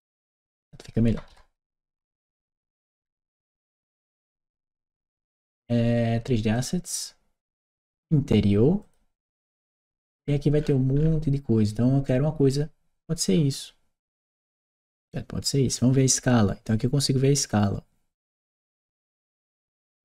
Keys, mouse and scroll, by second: 0.4 click, 1.8-3.4 typing, 3.7 Return, 6.4 click, 8.6 click, 10.0-11.5 scroll down 2, 15.5 click.